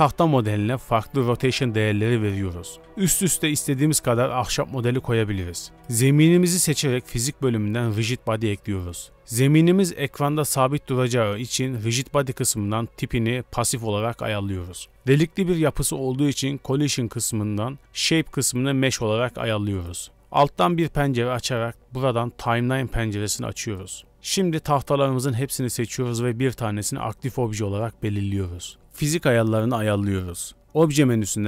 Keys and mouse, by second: 0.4 r, 2.1-3.2 drag, 3.2-4.4 typing, 5.7 g, 20.2 click.